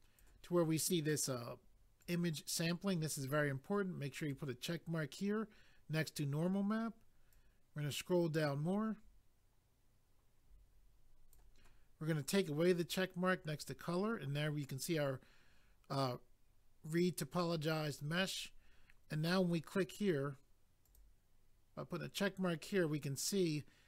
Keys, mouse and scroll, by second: 2.0 click, 2.1 click, 4.2 click, 4.3 click, 7.3 click, 12.7 click, 14.0 click, 20.8 click, 20.9 click.